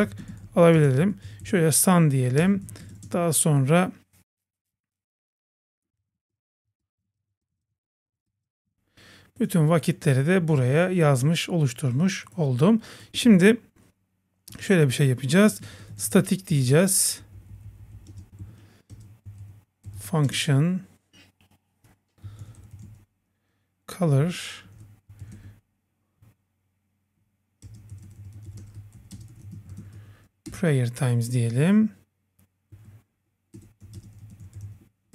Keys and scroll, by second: 0.0 Return, 2.4 Return, 6.8 Return, 7.4 Return, 8.2 Return, 10.4 super+s, 14.5 Return, 17.2 Left, 17.8 Left, 18.4 super+Right, 30.5 Return.